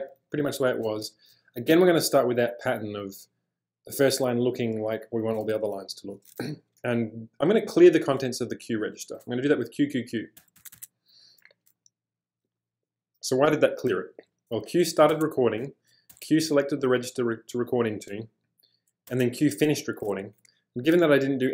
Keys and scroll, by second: 0.0-1.7 typing, 10.4 q, 10.6 q, 10.7 q, 15.1 q, 19.1 q.